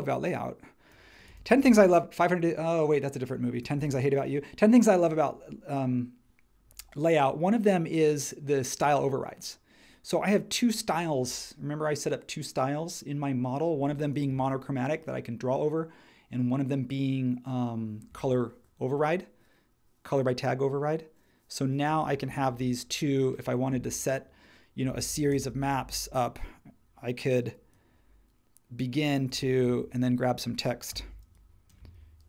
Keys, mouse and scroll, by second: 1.1 space, 30.9 t.